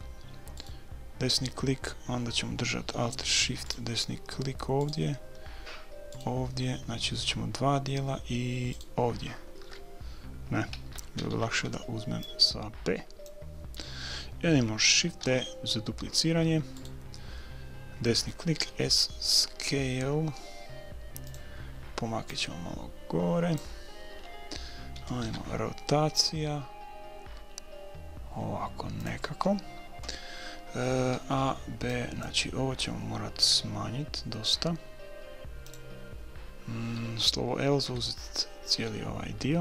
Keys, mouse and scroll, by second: 0.6-2.4 right drag, 3.7-7.9 right drag, 8.7-10.5 right drag, 10.9 a, 11.4 b, 15.2 shift+d, 18.6 s, 22.3-24.0 drag, 24.0-26.5 middle drag, 25.3 r, 31.2 a, 31.4 b, 33.5 s.